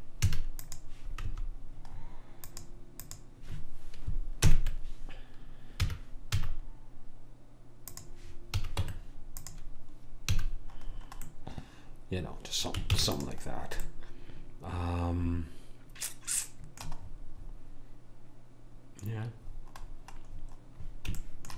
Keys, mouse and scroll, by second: 0.3 a, 4.5 ctrl+l, 6.0 r, 8.6 a, 9.0 Tab, 10.5 a, 13.0 ctrl+s, 19.1-21.5 middle drag.